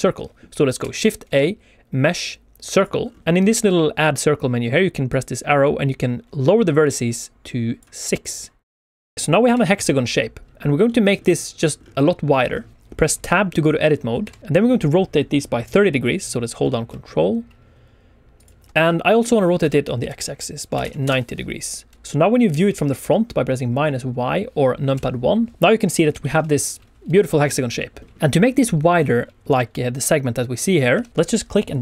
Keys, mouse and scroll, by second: 0.7 shift+a, 2.9 scroll up 3, 3.2 shift+middle click, 5.0 click, 6.8 click, 8.1 click, 8.3 click, 8.7 click, 9.1 middle click, 9.4 KP_7, 9.9-10.8 scroll down 3, 10.8 middle click, 11.7-12.1 scroll up 2, 12.1 Tab, 12.1 shift+middle click, 12.8 KP_7, 13.4 click, 14.3 r, 18.3 ctrl+click, 18.7 Escape, 18.7 middle click, 18.7-20.7 typing, 21.0 Return, 21.9 KP_1, 21.9 middle click, 22.1 middle click, 24.9 KP_1, 26.1 shift+middle click, 27.7 shift+middle click, 28.1 shift+middle click, 28.1-28.8 scroll up 1, 30.9 KP_1, 31.1 Tab, 31.1 click, 31.1 shift+middle click, 31.1-31.5 shift+scroll down 1.